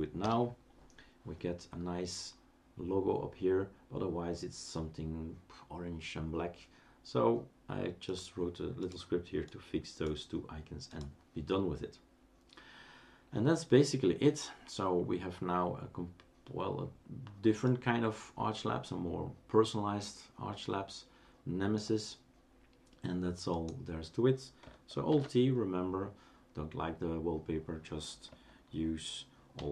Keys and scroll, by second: 0.2 Return, 25.1 alt+t.